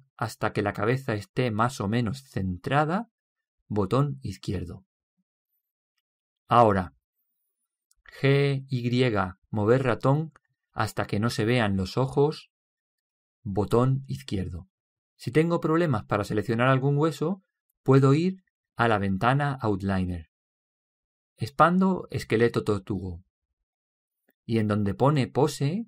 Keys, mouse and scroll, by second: 8.7 g, 15.3-17.1 middle drag.